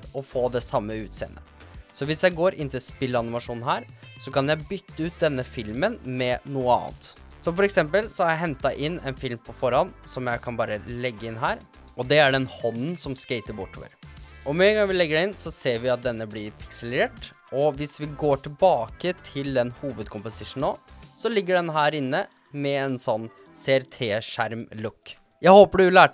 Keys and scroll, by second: 12.7 space, 17.4 space.